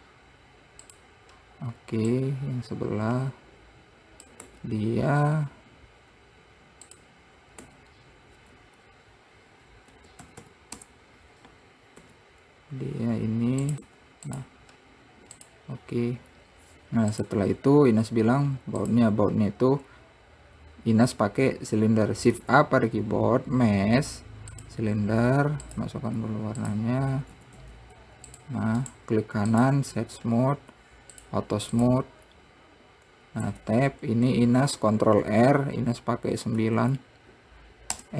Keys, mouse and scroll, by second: 5.1 `, 9.2 Escape, 10.5 r, 12.6 r, 16.0 click, 17.7 click, 18.2 scroll down 1, 18.6 scroll up 3, 19.0-19.4 scroll down 3, 19.4 click, 22.9 shift+a, 27.4 click, 27.9 s, 29.4-31.7 right drag, 31.7 click, 32.4 click, 34.0 Tab, 35.8 ctrl+r.